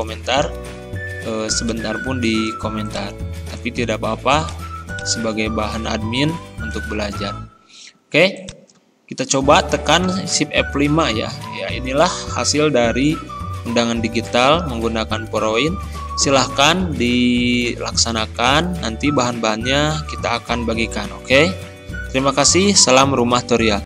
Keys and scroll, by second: 10.7 shift+F5.